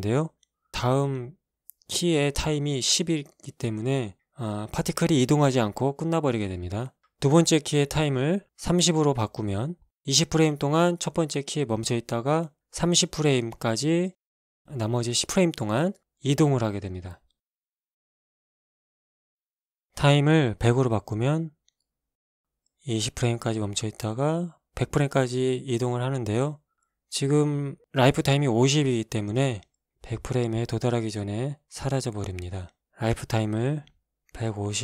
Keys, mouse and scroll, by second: 1.2 Escape, 2.7 click, 7.3 click, 8.0 KP_3, 8.1 KP_0, 8.4 Return, 12.2 alt+a, 14.1 alt+a, 21.3 click, 22.1 KP_1, 22.3 KP_0, 22.5 KP_0, 23.1 Return, 24.8 shift+Left, 25.3 alt+shift+a, 28.8 Escape, 31.1-32.9 drag, 33.2-34.3 drag, 34.3 KP_1, 34.4 KP_5, 34.5 KP_0.